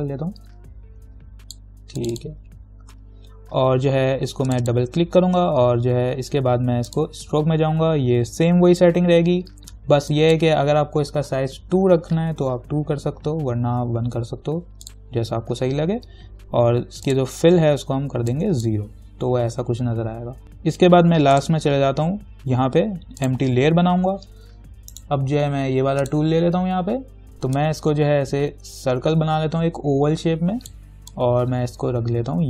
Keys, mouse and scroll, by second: 4.7 click, 7.1 click, 10.3 click, 12.0 2, 15.1 click, 17.3-20.4 drag, 20.4-21.6 scroll down 1, 21.6 click, 25.2 right click, 26.3-32.4 drag.